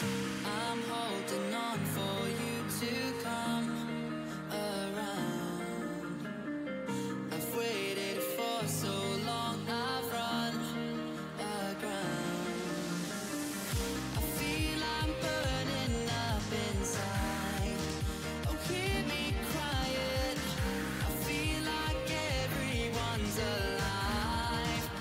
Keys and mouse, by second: 2.0-5.3 drag, 5.7-9.1 drag, 9.1 right click, 10.1 click, 10.8 right click, 11.0-12.4 drag, 12.4-25.0 right drag, 17.3-25.0 drag.